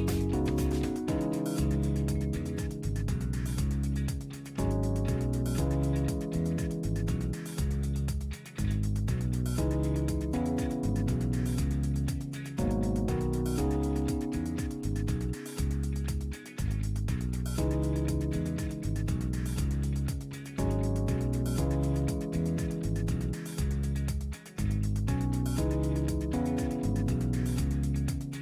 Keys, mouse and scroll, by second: 1.1-3.1 middle drag, 1.4-3.1 drag, 3.8 scroll up 2, 5.9 click, 7.4 click, 9.6 KP_3, 12.8 click, 15.0 click, 16.7 ctrl+click, 18.2 click, 20.0 KP_0, 20.3 KP_Decimal, 20.6 KP_5, 22.9 click, 25.1-27.1 middle drag, 25.5-27.1 drag, 27.7 scroll up 1.